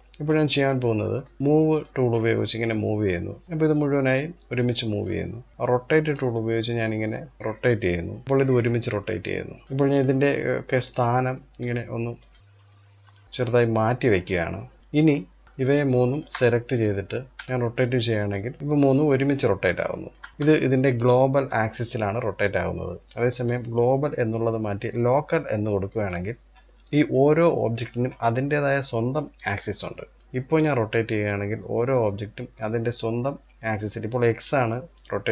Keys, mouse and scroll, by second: 0.0 middle click, 0.3-0.6 scroll up 1, 0.6 shift+middle click, 1.4-2.5 drag, 5.3-6.0 drag, 9.6 click, 10.4 click, 11.8 click, 12.4 click, 13.8 click, 14.7 drag, 14.8-15.2 middle drag, 15.2 click, 15.7 shift+click, 16.0-16.6 middle drag, 16.6 scroll up 1, 16.8-17.9 shift+middle drag, 17.9 click, 20.0-22.9 shift+middle drag, 22.9-26.0 drag, 29.9 click.